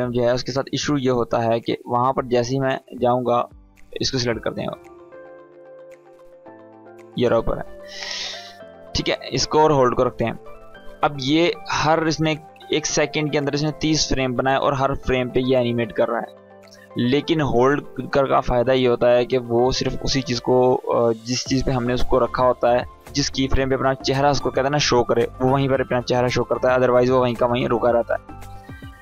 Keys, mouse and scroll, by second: 1.1 click, 5.0-5.3 scroll up 1, 5.7 space, 5.8-7.1 click, 6.2 space, 8.1 click, 10.8 space, 12.6-17.9 drag, 21.5 click, 26.6-29.0 drag.